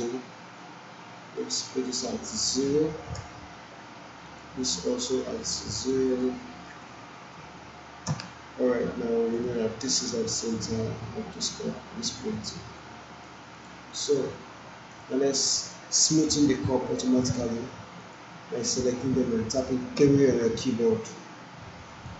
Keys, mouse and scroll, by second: 2.6 0, 3.2 Return, 4.3 click, 6.8 BackSpace, 7.4 0, 8.1 Return, 9.4 click, 9.9-10.5 alt+click, 10.5-13.3 alt+drag, 13.6 click, 13.9-15.2 alt+drag, 16.1 click, 18.0 shift+click, 20.0 3, 22.0 click.